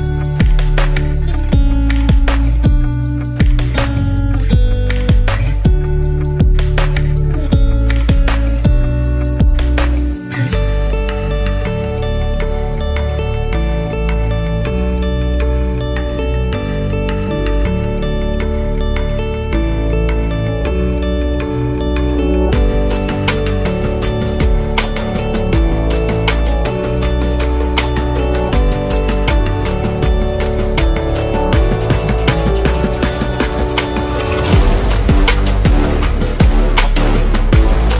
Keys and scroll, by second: 4.5 space, 7.5 super+z, 8.6 super+-, 10.5 super+-, 11.4 space, 15.9 z, 16.7 v, 16.9 space, 26.5 v, 34.6 BackSpace, 35.8 super+-.